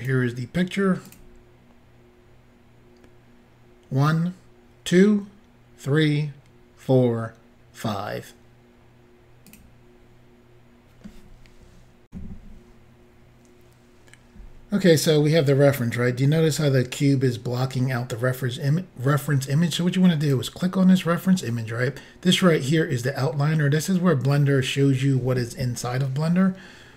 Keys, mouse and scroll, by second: 1.1 click, 9.5 click, 12.1 Insert, 20.2 click.